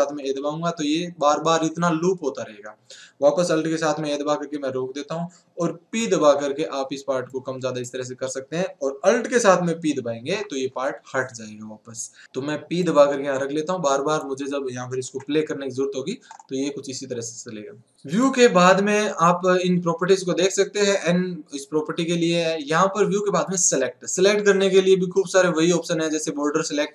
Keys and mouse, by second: 0.2 alt+a, 4.0 alt+a, 10.2 alt+p, 15.1 alt+a, 16.3-17.9 middle drag, 18.2-20.0 drag, 23.6-25.2 drag.